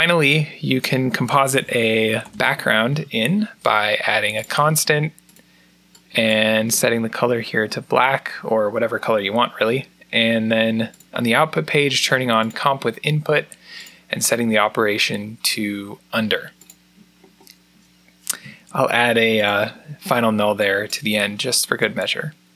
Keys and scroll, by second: 1.4-3.2 typing, 18.5 alt+n.